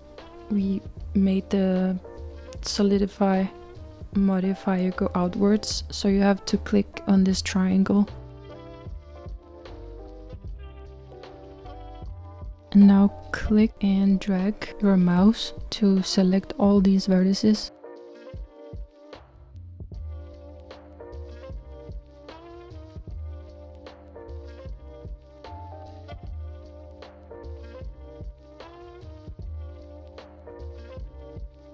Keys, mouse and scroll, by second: 5.3 click, 17.6 shift+click.